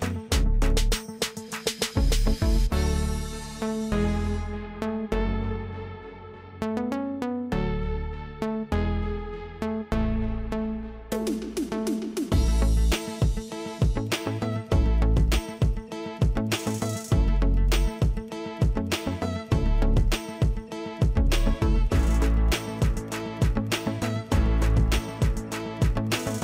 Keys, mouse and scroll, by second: 4.2-21.1 drag, 22.1 ctrl+click, 24.5-26.4 drag.